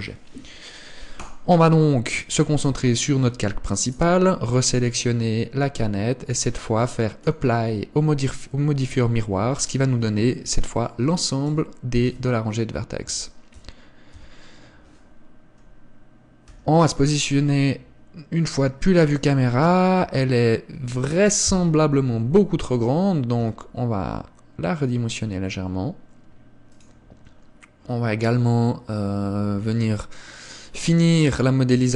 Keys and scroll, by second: 9.5 Tab, 9.9 a, 10.1 a, 11.7 a, 12.3 a, 13.3 a, 13.7 a, 14.3 Tab, 16.7 KP_0, 20.2 Tab, 20.9 Tab, 22.1 KP_1, 23.6 s.